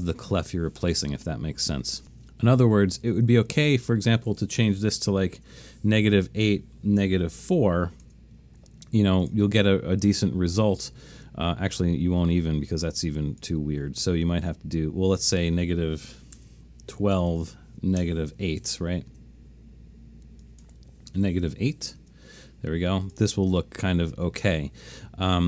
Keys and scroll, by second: 5.2 BackSpace, 5.4 BackSpace, 5.5 8, 6.1 Tab, 6.8-8.0 typing, 8.1 Tab, 16.4-18.4 typing, 19.2 Tab, 21.0-22.1 typing.